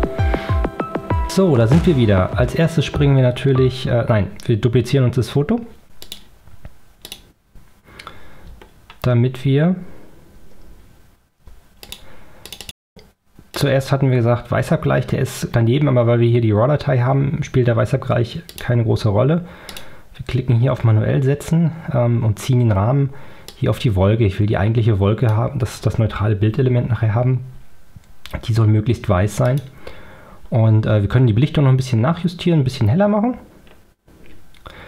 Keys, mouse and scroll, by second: 6.1 click, 7.1 click, 8.8 ctrl+scroll down 2, 11.0 ctrl+scroll down 2, 11.9 ctrl+click, 12.5 click, 13.6 click, 18.6 click, 19.7 click, 23.6-25.6 drag, 29.6 click, 31.4 scroll up 2, 32.3 scroll up 2, 33.6 scroll up 2.